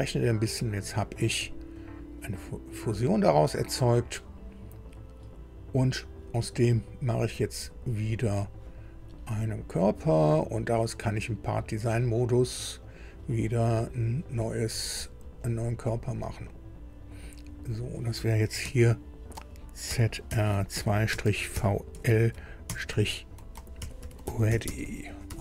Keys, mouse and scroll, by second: 1.7 click, 7.6 click, 9.0-9.3 scroll down 1, 10.0 click, 11.9 click, 12.8 click, 13.9-14.2 scroll down 1, 15.4 click, 16.8 scroll down 1, 17.7 click, 18.6 F2, 19.8-25.4 typing.